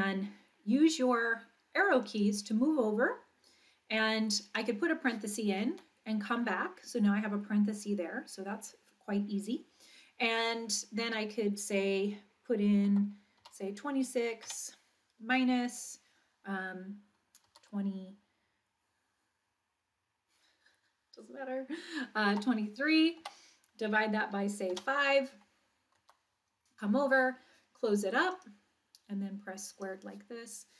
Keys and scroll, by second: 2.1 Left, 4.5 (, 5.7 Right, 12.9 2, 13.4 6, 14.4 -, 17.5 2, 22.3 3, 23.2 Down, 24.7 5, 26.1 Right, 28.3 ).